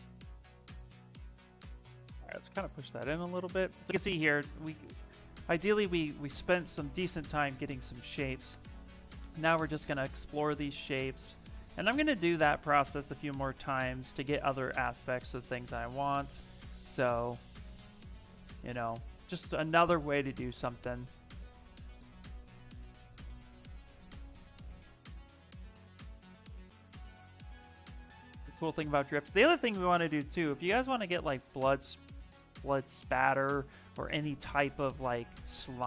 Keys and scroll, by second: 14.5 s, 19.5 s, 21.3 s.